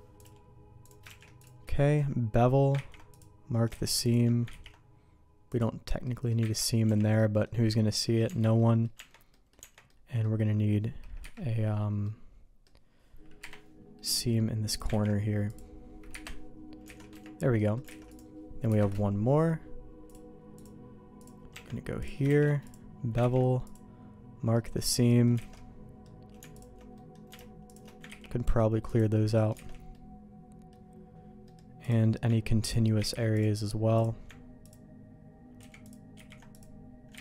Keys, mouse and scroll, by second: 0.1 click, 1.2 shift+g, 3.0 ctrl+e, 3.8 alt+a, 4.5 ctrl+e, 6.0 middle click, 6.5 ctrl+z, 6.8 Tab, 7.1 middle click, 7.6 middle click, 8.2 Tab, 8.5 middle click, 8.9 Tab, 9.3 middle click, 9.6 Tab, 9.8 middle click, 11.2 KP_Divide, 12.0 middle click, 13.4 KP_Divide, 14.0 middle click, 14.7 click, 15.0 ctrl+e, 16.1 KP_Divide, 16.9 alt+a, 17.1 Tab, 17.6 middle click, 17.9 alt+a, 18.1 click, 18.7 KP_Divide, 21.5 Tab, 22.0 click, 22.2 shift+g, 23.2 ctrl+e, 24.5 middle click, 24.9 middle click, 25.4 alt+a, 25.5 middle click, 26.5 alt+click, 26.9 middle click, 28.0 ctrl+e, 29.6 alt+a, 29.9 middle click, 31.4 middle click, 31.8 click, 32.6 ctrl+click, 32.9 ctrl+e, 33.9 click, 35.6 ctrl+z, 35.8 ctrl+click, 36.1 ctrl+e.